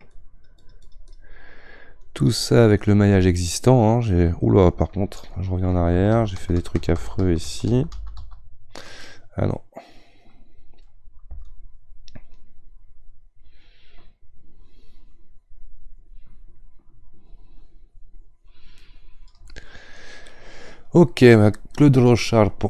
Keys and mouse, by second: 3.2-5.7 middle drag, 5.7 ctrl+z, 5.9 ctrl+z, 6.2 ctrl+z, 6.4 ctrl+z, 6.6 ctrl+z, 6.8 ctrl+z, 7.0 ctrl+z, 7.2 ctrl+z, 8.2 ctrl+z, 9.0-11.4 middle drag, 11.4-14.4 shift+drag, 19.5-21.3 middle drag, 21.3-22.6 drag.